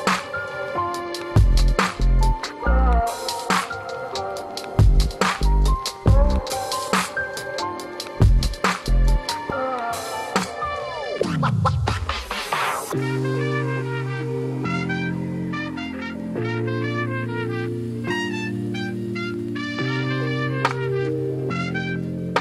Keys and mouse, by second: 1.6-2.2 drag, 2.5 space, 5.8 space, 6.8 Delete, 7.7 shift+click, 8.7 click, 9.3 ctrl+s, 9.6 shift+middle click, 10.5-11.3 drag, 11.6 middle click, 11.8 shift+middle click, 12.3 click, 14.7-16.4 drag, 17.0 middle drag, 17.7 KP_Decimal, 18.0 middle drag, 18.7 middle click, 19.4-21.6 drag, 22.0 KP_0.